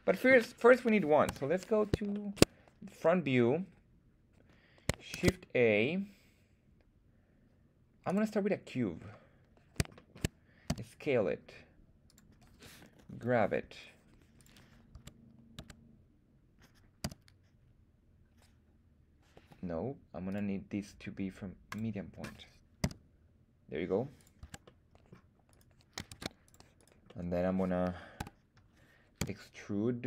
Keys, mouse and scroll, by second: 1.2 KP_1, 2.1 shift+middle drag, 5.1 shift+a, 8.9-9.8 scroll down 1, 9.8 scroll down 1, 9.9 shift+middle drag, 10.7 s, 12.1 click, 13.1 g, 14.3 click, 14.9 Tab, 15.5 Tab, 17.0 s, 19.3 Escape, 20.2-21.7 drag, 22.8 s, 24.2 click, 24.4 Tab, 24.6 middle click, 25.5 right click, 26.1 ctrl+Tab, 26.7 click, 26.7 right click, 27.0 middle click, 28.2 KP_1, 29.2 e.